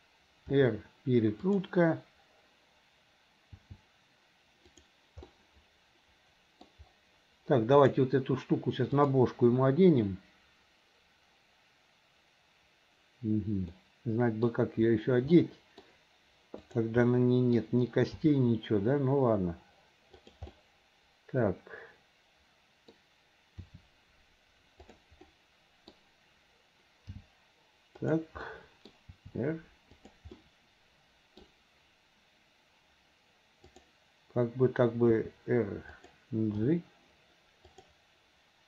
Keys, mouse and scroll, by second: 1.7 r, 3.9 g, 5.3-6.7 middle drag, 7.8 click, 9.0-12.7 drag, 13.8 middle click, 15.4 middle click, 16.7 click, 17.1 middle click, 18.2 g, 20.5-23.0 middle drag, 25.1 r, 25.3 middle click, 27.1 g, 28.5 middle click, 29.2 r, 30.5 middle click, 33.7 click, 36.0 r, 37.2 g.